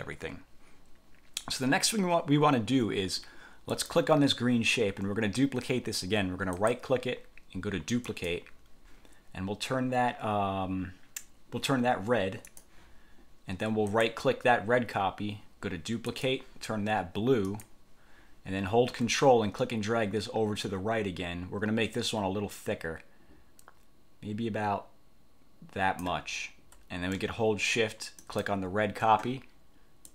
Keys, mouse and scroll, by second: 3.8 click, 6.7 click, 8.2 click, 12.6 click, 14.0 click, 16.2 click, 17.6 click, 19.7-26.3 ctrl+drag, 28.3 shift+click.